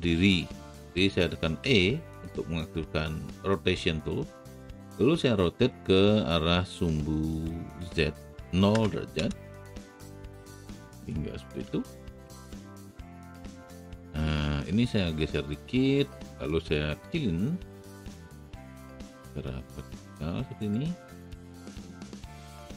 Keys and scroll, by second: 1.7 e, 8.7 KP_0, 9.1 Return, 17.7 r.